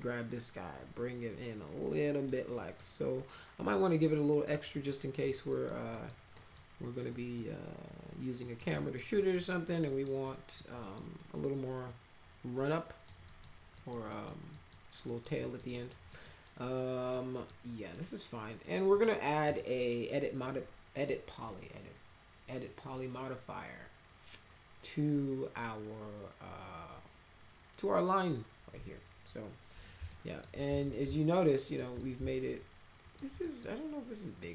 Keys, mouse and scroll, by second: 0.7-2.2 drag, 2.5 middle click, 3.7 click, 4.7 middle drag, 5.5 middle click, 5.9 middle drag, 6.3 middle click, 7.0 middle click, 8.4 middle click, 8.7 middle click, 9.1 middle click, 9.8 middle click, 10.2 middle click, 10.8 middle click, 11.8-13.0 drag, 13.2 middle click, 13.7 middle click, 14.1 middle click, 14.5 middle click, 15.0 middle click, 15.4 middle click, 15.7 middle click, 16.1 middle click, 17.1 middle click, 17.7 middle click, 18.9 click, 19.4 click, 30.1 alt+middle drag, 30.8 click, 31.1 alt+middle click, 31.9-33.1 alt+middle drag, 33.4 middle click, 34.4 middle click.